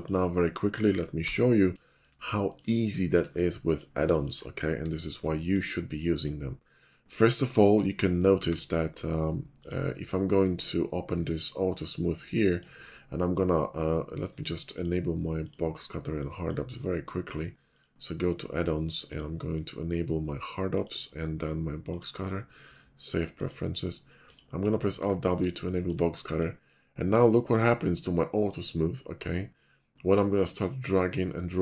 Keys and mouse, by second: 1.1 n, 1.7-2.1 shift+middle drag, 2.7-3.2 shift+middle drag, 3.2-5.4 drag, 8.3 shift+a, 12.3 shift+middle click, 25.0 alt+w.